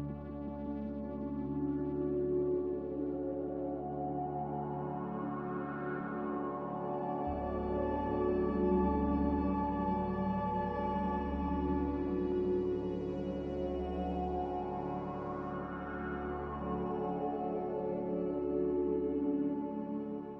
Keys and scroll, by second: 2.2 a, 8.6 ctrl+c, 13.5 m, 16.5 b, 20.0 n.